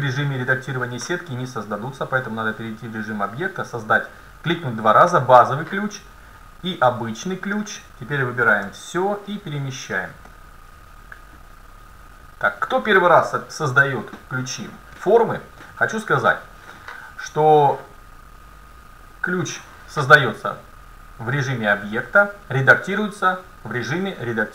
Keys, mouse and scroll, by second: 2.2-5.0 drag, 6.9 Tab, 8.7 a, 9.3-13.2 drag, 10.3-11.4 middle drag, 13.3-15.2 middle drag, 20.3-22.4 middle drag.